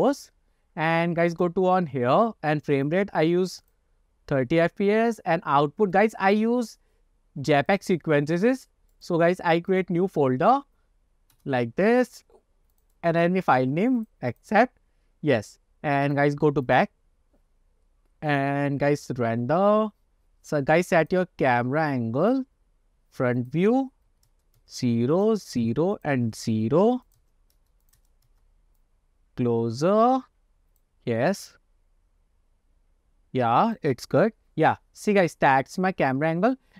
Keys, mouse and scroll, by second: 1.4 click, 2.8-3.9 drag, 6.0 click, 6.4 click, 16.1 click, 17.6 click, 18.4-20.1 drag, 21.1 click, 22.3 click, 23.5-24.8 drag, 25.3 click, 26.1 click, 27.1 click, 27.9 click, 29.0-30.9 drag, 31.4-33.9 drag, 35.5-35.9 scroll up 2.